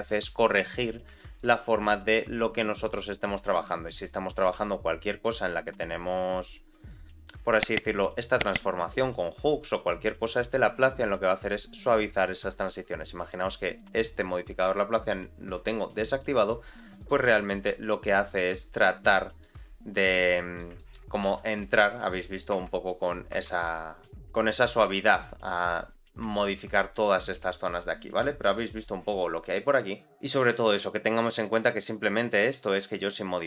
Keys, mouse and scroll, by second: 0.7 click, 1.0 shift+middle click, 1.6 scroll up 1, 1.9 shift+middle click, 2.4 r, 4.0-4.4 scroll down 2, 4.5 s, 8.8 middle click, 9.3 g, 13.1 click, 13.6 click, 16.1 click, 17.0 click, 18.8 click, 19.4 click, 20.2 middle click, 20.7 shift+middle click, 21.2 g, 22.5 Tab, 23.3 Tab, 24.0 click, 25.5-26.2 scroll up 2, 26.3 shift+middle click, 27.2-28.1 scroll down 2, 28.4 middle click, 29.2 middle click, 30.0-30.4 scroll up 2, 30.4 g, 32.4-32.7 scroll down 2, 32.8 shift+middle click, 33.2-33.4 scroll up 1.